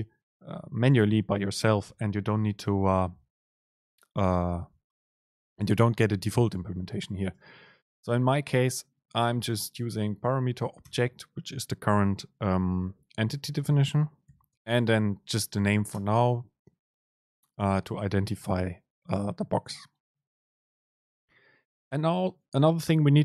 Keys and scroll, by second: 7.5 super+space, 14.7 super+space.